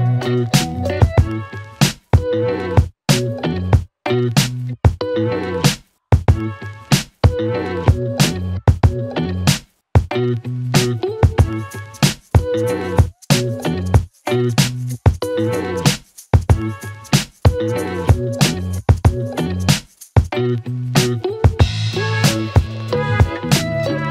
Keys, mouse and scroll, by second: 0.7-3.2 click, 3.2 space.